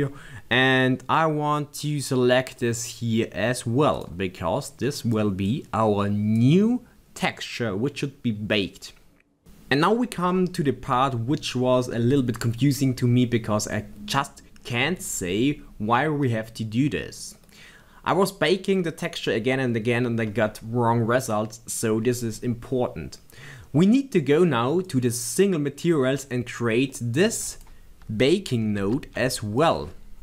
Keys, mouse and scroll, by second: 2.9 click, 16.5 click, 19.3 click, 24.9 click, 27.7 click, 29.6 click.